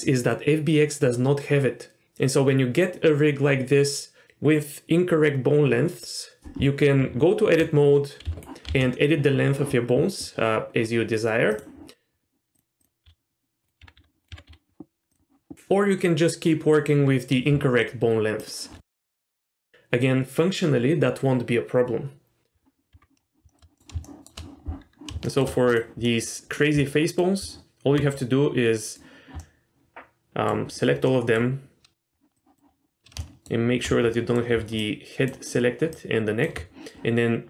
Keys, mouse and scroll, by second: 7.0 Tab, 8.3 s, 8.3 s, 8.7 s, 12.5 click, 12.8 click, 13.0 s, 13.8 Tab, 13.9 r, 14.4 Tab, 14.5 s, 18.4 shift+click, 19.0 s, 22.9 Tab, 23.2 scroll down 2, 23.5 shift+middle click, 23.7 middle click, 24.0 shift+middle drag, 24.5-25.1 scroll up 1, 25.1 scroll up 1, 25.2 shift+middle drag, 25.7 click, 26.1 middle click, 26.5-26.8 scroll down 1, 26.8-27.2 middle drag, 27.4 Tab, 28.2 middle click, 29.4-30.5 middle drag, 30.7-31.2 scroll up 3, 31.1 middle click, 32.1 scroll down 1, 32.3 click, 32.7-33.0 scroll up 3, 33.2 shift+middle click, 34.1 middle click, 34.8 ctrl+click, 35.9 ctrl+click.